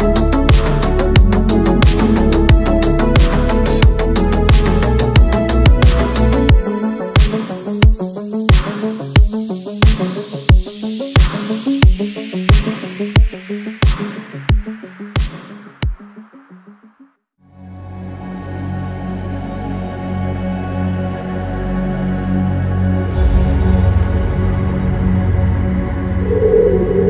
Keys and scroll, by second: 8.2 ctrl+z, 12.3 ctrl+z, 12.7 space, 12.9 e, 14.4 space, 18.4 ctrl+z, 19.3 ctrl+z, 20.5 ctrl+z.